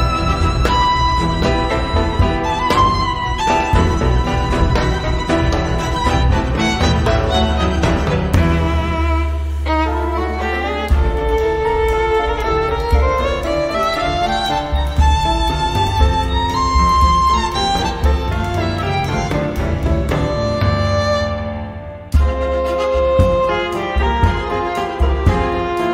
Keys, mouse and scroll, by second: 1.6-2.1 scroll up 2, 2.8-3.6 scroll down 5, 4.2-8.2 drag, 8.5 0, 9.3-9.9 scroll down 2, 10.3 scroll up 2, 11.3 scroll down 2, 11.7-12.4 scroll up 4, 12.7 scroll down 2, 13.7 scroll up 2, 15.6 click, 16.4 click, 18.2 click, 21.3 click.